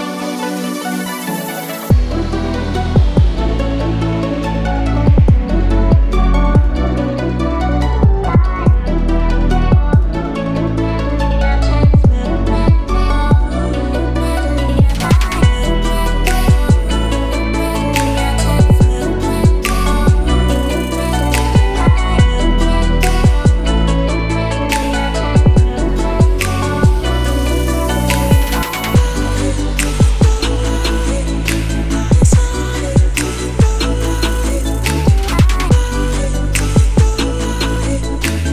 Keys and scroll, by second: 2.1-3.4 typing, 3.8 shift+Return, 4.5 Return, 26.4-28.7 typing, 29.7-31.3 typing.